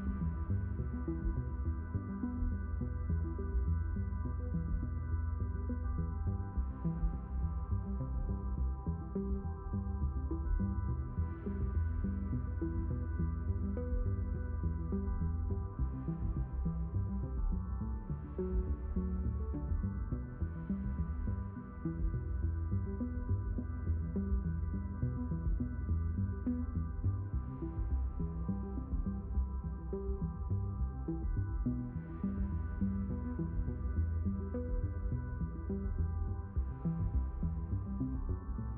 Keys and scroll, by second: 0.2 q, 1.0 d, 6.9 q, 12.7 q, 13.6 d, 19.3 q, 20.0 d, 25.6 q, 27.7 s, 31.7 q, 35.6 q.